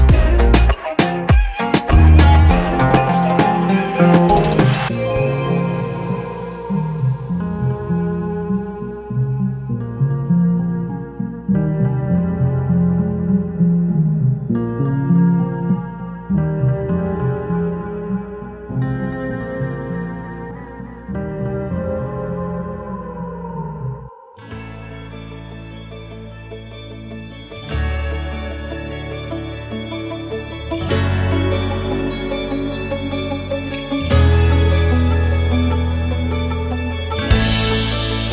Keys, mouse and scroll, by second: 3.1 scroll up 1, 3.3 alt+click, 3.9 alt+middle click, 4.0 alt+scroll down 1, 4.1 alt+click, 4.9 alt+middle click, 4.9 alt+scroll up 1, 5.1-6.7 alt+drag, 7.0 shift+right click, 7.8 scroll down 2, 8.1 alt+click, 8.5 scroll down 2, 8.9 alt+middle click, 11.2 right click, 12.4 click, 13.7 alt+click, 14.4 alt+middle click, 15.8 click, 17.4 click, 18.7 click, 19.7-20.8 typing, 22.0-22.9 drag, 23.2 click, 24.9-27.7 drag, 28.3-28.8 drag, 29.3-29.8 drag, 30.4-30.8 drag, 31.3-31.7 drag, 32.3-33.8 drag, 34.4-34.8 drag, 35.3-36.3 alt+drag, 36.8-38.3 ctrl+right drag.